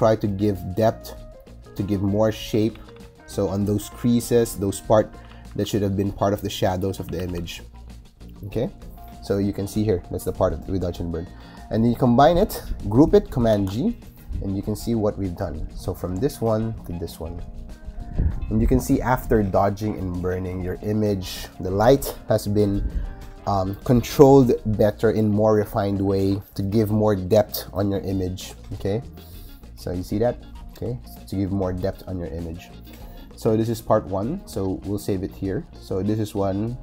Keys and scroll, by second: 2.4 [, 5.0 ], 6.8 ], 13.4 super+g.